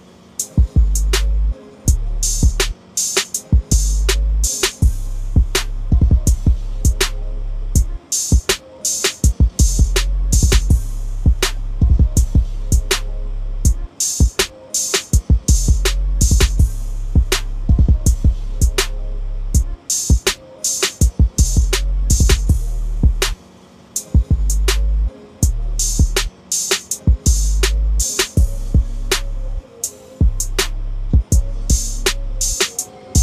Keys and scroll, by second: 5.6 typing, 9.1-9.8 typing, 12.4 ctrl+a, 13.0 ctrl+c, 14.8 ctrl+v, 26.6 ctrl+c, 29.1 ctrl+n, 30.5 Return, 31.2 ctrl+v.